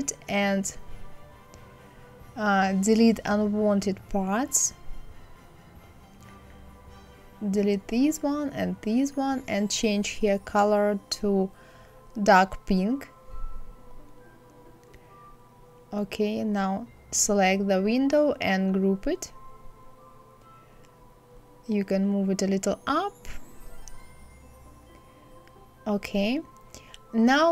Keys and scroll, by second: 6.7 Delete, 7.8 Delete, 20.2 Up, 21.6 Right, 22.1 Up, 22.8 Left.